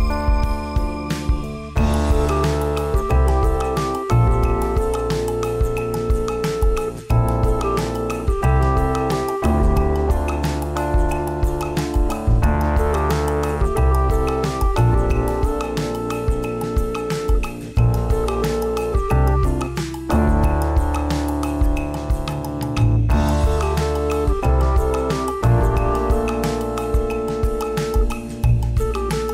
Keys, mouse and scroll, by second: 0.0 r, 3.6 g, 5.1 KP_1, 5.5 KP_5, 5.9 KP_5, 6.4 Tab, 7.3 shift+middle click, 7.9 z, 8.5 right click, 9.7 click, 10.3 click, 14.5 click, 15.4 click, 15.7 click, 18.3 right click, 19.1 g, 25.5 right click, 26.4-26.9 click, 26.6 click, 26.8 click, 28.2 right click.